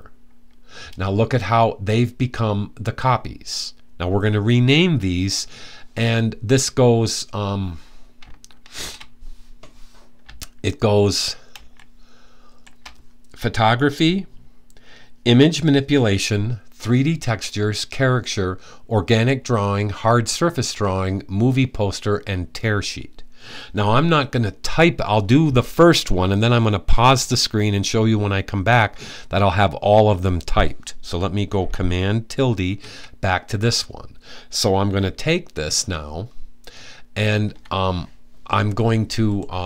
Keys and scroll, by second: 8.4 super+`, 12.4 super+`, 32.3 super+`.